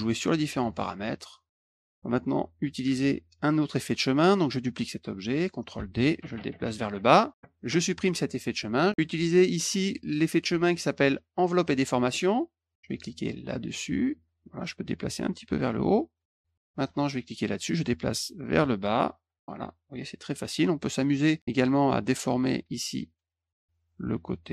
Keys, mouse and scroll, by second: 0.1 click, 0.5 click, 0.9 click, 1.7 click, 5.7 ctrl+d, 6.0-7.0 drag, 7.9 click, 8.6 click, 11.6 click, 13.5 click, 15.1 click, 17.3 click, 18.7-20.2 drag, 21.6 click, 23.1 click, 24.0 click.